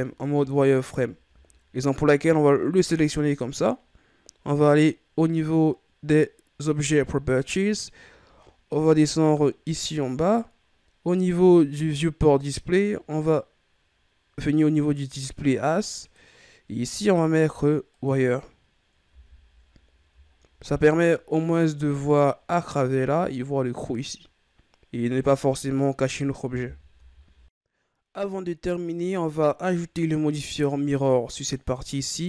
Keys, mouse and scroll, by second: 0.0-1.0 ctrl+scroll down 2, 1.0-1.7 shift+scroll up 2, 7.2 click, 8.0-8.6 scroll down 2, 8.6-9.4 scroll down 7, 9.4 scroll down 3, 10.5-12.5 scroll down 4, 12.5-13.6 scroll down 2, 15.9-18.9 drag, 19.8-20.5 scroll down 5, 20.6-21.6 middle drag, 21.6-21.9 scroll up 4, 22.1-25.1 middle drag, 25.2 right click, 26.5 KP_1, 26.9 a, 27.7-31.3 scroll down 3, 31.3 right click.